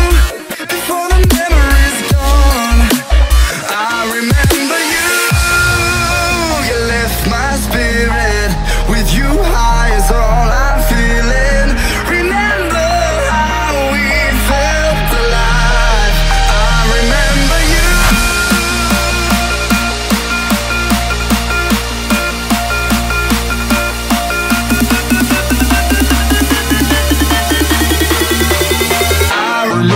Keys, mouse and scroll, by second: 3.1 Tab, 3.1 F10, 3.4 right click, 4.1 click, 4.9-6.6 typing, 7.3 click, 8.2 F10, 8.7 click, 9.4 right click, 10.1-10.9 scroll down 1, 10.9 click, 12.5-15.3 typing, 15.4 Return, 16.7 click, 21.5 KP_8, 22.5 Return, 24.0 click, 25.0 Delete, 25.7 click, 26.1-27.3 typing, 27.7 click, 28.5 F10, 28.9 right click.